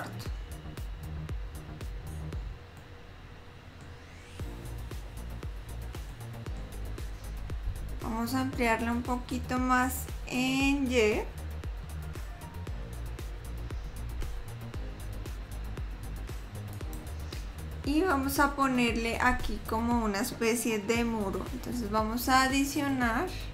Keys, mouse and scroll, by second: 0.8-1.2 scroll up 3, 2.1-2.5 scroll down 1, 2.9 middle click, 4.4 scroll down 1, 5.2-5.9 scroll up 1, 6.3 middle click, 7.8 a, 12.1 s.